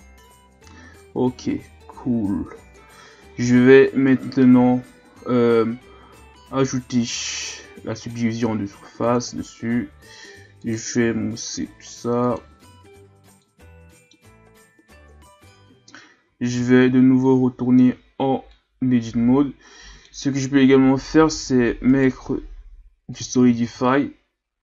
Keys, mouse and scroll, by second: 1.0 Tab, 1.5 a, 1.8-2.7 scroll down 3, 2.7 KP_1, 3.5-4.1 scroll up 3, 4.1 right click, 7.2 click, 9.2-10.2 drag, 10.2 w, 12.2-12.8 drag, 12.8 a, 13.4-15.1 middle drag, 15.1 KP_1, 15.6 Tab, 16.2 a, 16.5 a, 18.5-21.2 middle drag, 21.2 Tab, 21.9 right click, 23.1 click.